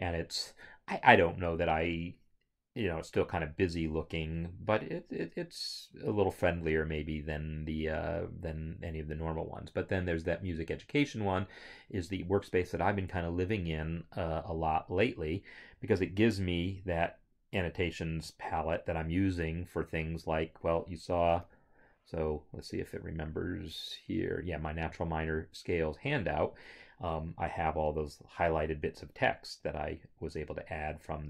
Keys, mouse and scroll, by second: 18.3 click, 21.4 click, 21.5 F4, 25.4 click.